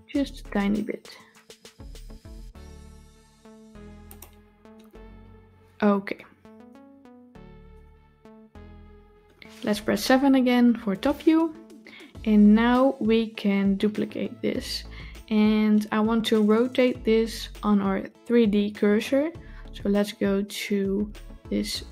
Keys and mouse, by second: 7.4 Tab.